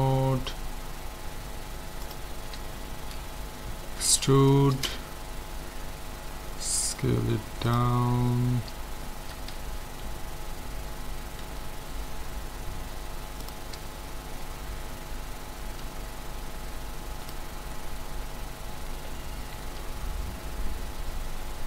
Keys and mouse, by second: 2.0-3.8 drag, 3.8 middle click, 4.1 e, 6.4 s, 8.2-9.7 middle drag, 11.4 s, 13.9-16.3 middle drag, 15.9 s, 19.7 KP_1.